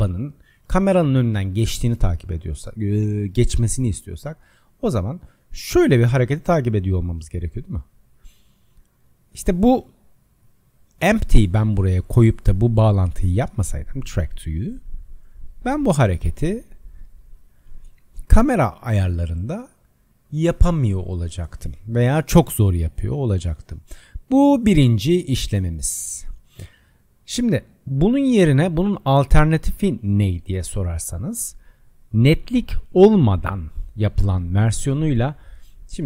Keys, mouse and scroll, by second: 2.4 click, 11.6 click, 13.8 click, 25.2-28.4 middle drag, 28.4 click.